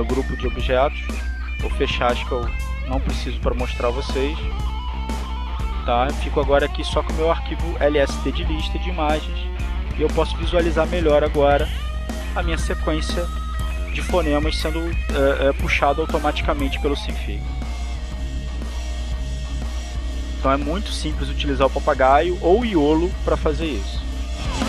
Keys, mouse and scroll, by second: 1.0 click, 1.9 click, 4.1 click, 5.5 click, 6.8-7.9 drag, 10.1 click, 11.0 click, 12.1 click, 16.2 click, 17.2-18.2 drag, 18.7 click, 22.1 click, 23.7 click.